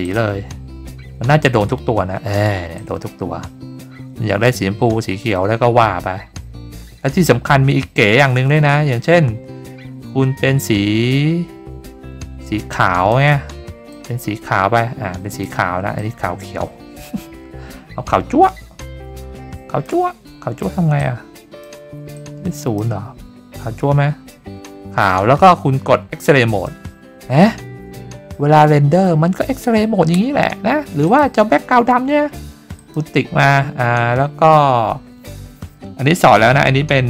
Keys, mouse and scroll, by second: 0.0 click, 1.4-2.3 drag, 2.7-13.1 drag, 13.9-15.4 drag, 15.9-19.8 drag, 21.0 click, 22.1 click, 24.1 middle click, 24.2-26.4 scroll up 4, 26.4 click, 27.9 scroll up 3, 28.6-29.5 scroll down 5, 28.6 middle click, 28.7 middle click, 31.0 click, 32.7 click, 34.5-34.9 scroll down 1.